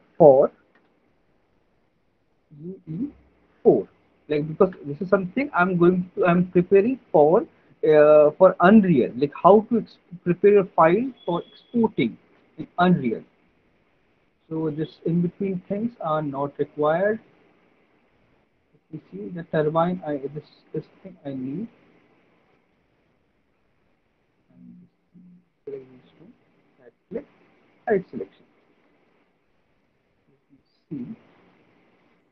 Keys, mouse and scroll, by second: 9.2 click, 10.2 click, 12.4 alt+middle click, 12.9 middle click, 13.1 middle click, 14.5 middle click, 20.6 alt+middle click, 21.6 click, 23.4 middle click, 23.9 middle click, 24.6 ctrl+click, 26.4 right click, 28.2 click, 28.9 alt+middle click, 29.6 middle click, 29.9 alt+middle click, 30.9 alt+middle click, 31.1 middle click, 31.6 middle click.